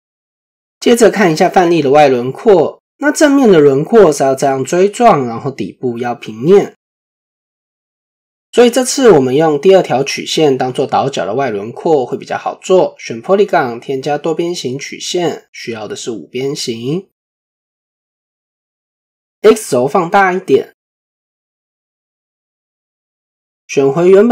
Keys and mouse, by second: 0.1 click, 1.6 click, 2.0-2.4 middle drag, 2.9-3.2 middle drag, 3.7-4.0 middle drag, 4.8-5.4 middle drag, 6.1-6.4 middle drag, 7.8 shift+middle drag, 10.1 click, 22.8 Tab.